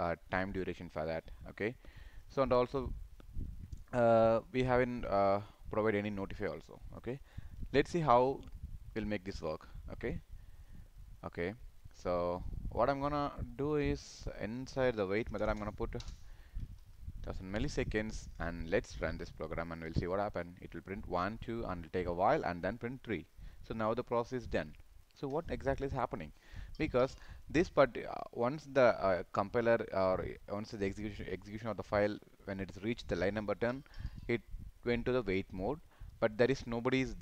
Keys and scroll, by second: 16.9 ctrl+s.